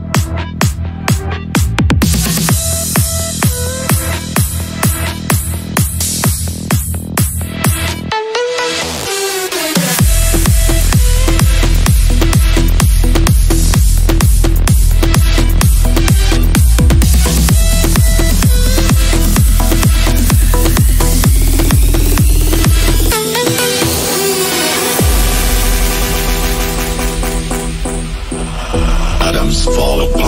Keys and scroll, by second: 4.1 shift+F2, 7.5 a.